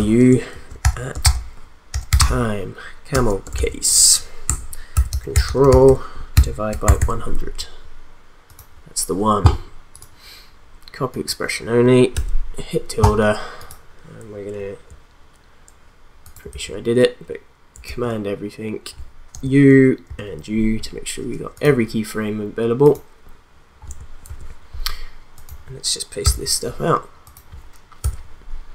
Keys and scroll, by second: 0.0-0.8 typing, 1.8-6.8 typing, 4.4 Left, 16.5 ctrl+a, 17.8 ctrl+a, 19.3 u, 24.2 ctrl+v, 26.2 ctrl+v, 28.0 ctrl+v.